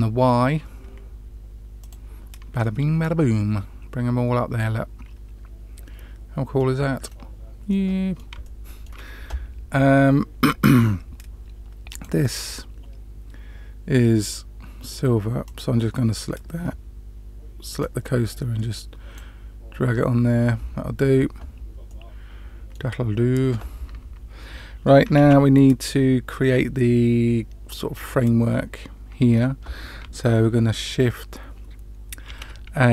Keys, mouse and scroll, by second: 2.5-6.6 middle drag, 6.9-7.6 scroll down 2, 7.6-8.2 middle drag, 8.4-8.8 shift+middle drag, 11.8 click, 15.4 click, 17.7-19.1 drag, 21.8-22.7 middle drag, 25.1 shift+a, 32.2 shift+a.